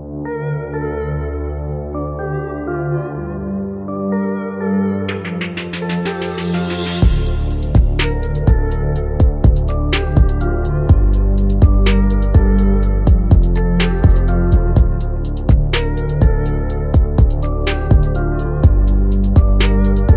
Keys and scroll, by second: 0.4 Escape, 13.0 Delete.